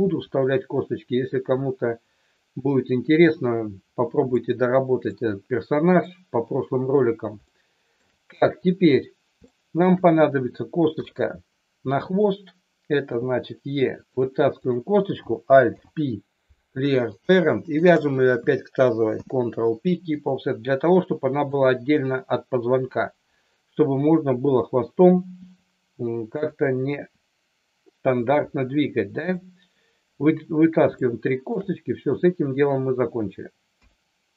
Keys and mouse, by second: 4.3 shift+middle click, 7.5 shift+middle click, 9.4 shift+middle click, 10.9 KP_3, 13.0 e, 14.0 click, 14.7 click, 15.8 alt+p, 17.7 shift+click, 19.0 ctrl+p, 21.5 click, 25.4 e, 26.5 click, 26.9 e, 28.1 click, 28.3 e, 29.1 click, 31.0 shift+middle click, 33.8 KP_1.